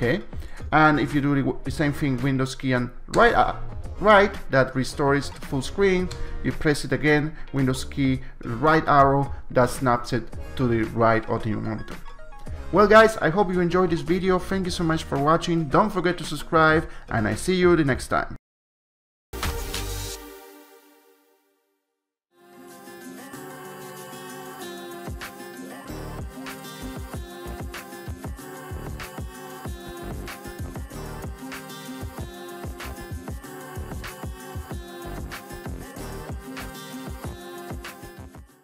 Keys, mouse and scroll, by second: 0.6 click, 3.1 super+Right, 6.1 super+Right.